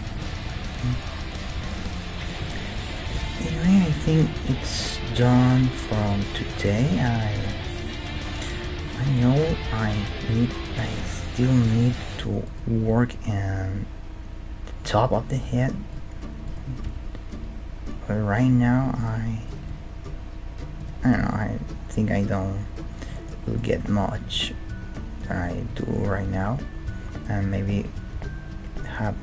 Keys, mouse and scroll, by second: 1.1 middle click, 1.6 Tab, 3.1 KP_1, 8.4 middle click, 8.9-10.7 middle drag, 9.4 KP_3, 10.9 middle click, 11.2 Tab, 11.6-12.8 drag, 12.8-14.3 right drag, 12.8 g, 15.3-18.3 right drag, 16.9 g, 19.5-21.4 right drag, 19.7 g, 21.2 Tab, 21.8 middle click, 22.3-23.6 middle drag, 23.6-25.1 drag, 23.8 Tab, 25.1-27.8 right drag, 26.2 g, 28.1 g.